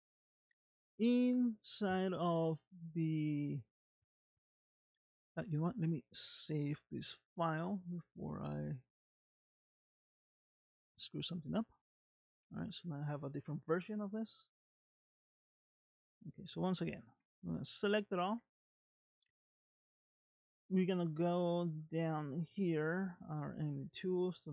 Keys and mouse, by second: 5.3 click, 8.7-11.6 drag, 15.8 click, 17.1 a.